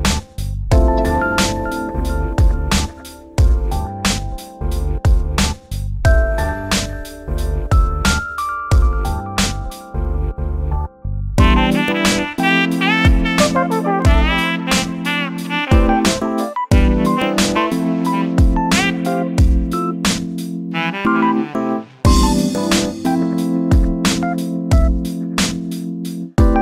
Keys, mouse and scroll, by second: 0.8 ctrl+b, 3.3-5.2 middle drag, 5.2 e, 6.9 ctrl+z, 7.3 e, 8.5 Tab, 8.7 scroll down 5, 8.9-10.2 middle drag, 10.2 scroll up 1, 10.3 scroll down 2, 10.5-11.2 middle drag, 11.2 scroll up 1, 11.3-12.0 middle drag, 12.0 click, 12.3 Tab, 12.6 2, 12.8 click, 13.3 ctrl+b, 15.2 e, 16.3 ctrl+z, 16.5 scroll up 4, 16.7 middle click, 17.5 click, 18.1 2, 18.3 click, 18.5 3, 18.6 click, 19.7 e, 21.1 scroll down 4, 21.2 middle click, 22.0 3, 22.1 click, 22.8 1, 23.1 2, 23.3 click, 24.3 click, 25.1-26.6 drag.